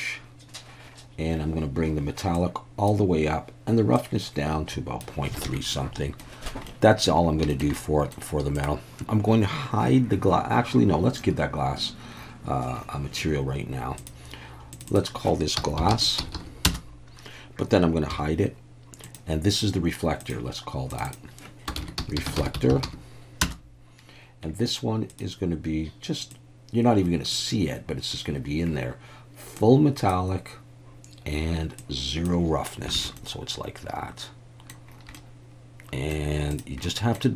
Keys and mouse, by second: 2.3 click, 4.0-5.1 drag, 5.5 alt+a, 5.7-6.2 middle drag, 6.7-7.1 middle drag, 7.5 shift+middle click, 7.7-8.1 middle drag, 8.6 drag, 14.0 click, 14.7 click, 14.9-17.2 drag, 16.3 s, 18.1 h, 19.1 click, 20.3 click, 20.9 click, 21.1-24.1 drag, 25.1 click, 29.6 click, 31.8 click, 33.0 alt+a, 33.2-34.7 middle drag, 35.1-36.1 middle drag, 36.5 click, 36.8 middle click.